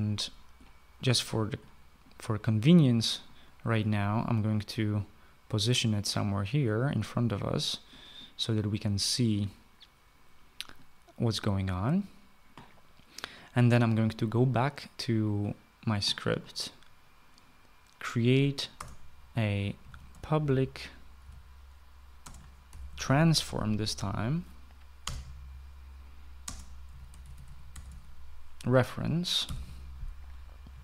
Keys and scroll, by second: 19.2 Return, 20.0-24.4 typing, 25.5 Return, 26.9-29.9 typing.